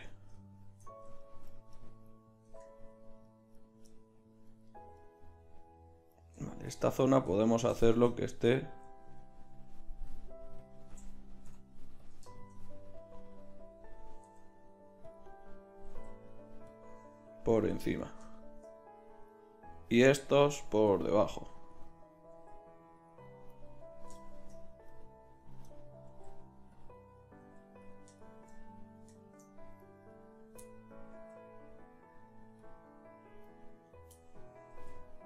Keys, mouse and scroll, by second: 2.5 Tab, 8.2 right click, 8.4 right click, 8.5 middle click, 9.1-10.1 middle drag, 10.1-12.3 drag, 11.5 ., 12.5 middle click, 14.2 g, 16.1 g, 17.7 g, 20.9 g, 22.3 g, 26.1 g, 26.9 click, 27.6 g, 31.1 g, 32.9-33.9 drag, 33.9-34.9 middle drag, 34.9 click, 34.9 g.